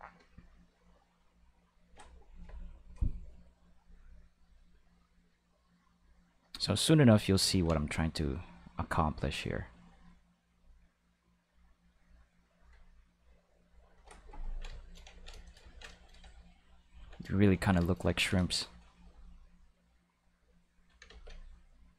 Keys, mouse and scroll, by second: 0.3 click, 1.0 click, 4.4 click, 5.3 click, 6.1 click, 6.7 click, 7.5 ctrl+z, 7.8 click, 8.7 click, 9.3 click, 10.1 click, 10.8 click, 11.4 click, 12.0 click, 13.2 click, 20.2 click, 21.1 ctrl+z, 21.5 click.